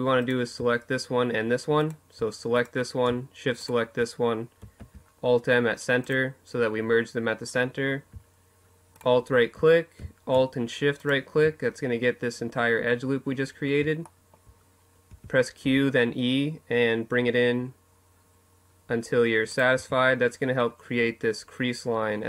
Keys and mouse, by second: 3.5 alt+m, 6.3 middle click, 7.7-12.2 right drag, 12.8 middle click, 13.8 q, 18.3-20.2 drag, 18.5 Tab.